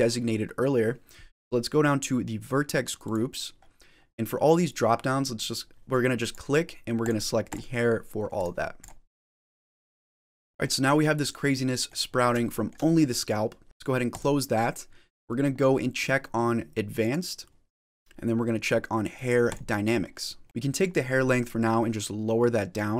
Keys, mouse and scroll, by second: 2.9 click, 3.4-6.0 scroll down 7, 6.1 click, 7.3 click, 8.7 click, 10.0 click, 10.5 middle click, 10.5 scroll down 2, 10.5 middle click, 12.0 scroll up 3, 12.3 shift+middle click, 12.8 middle click, 14.0 click, 16.9 click, 19.4 click, 19.9 scroll down 3, 20.3 middle click, 21.4 click.